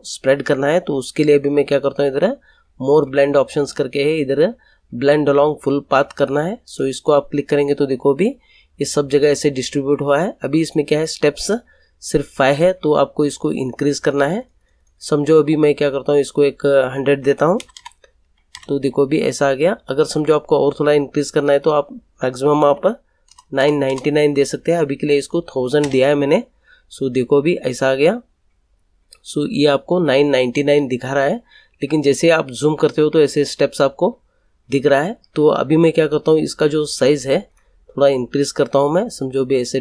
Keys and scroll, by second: 17.1 1, 17.5 0, 18.5 Return, 22.6 1, 23.2 0, 25.8 Return.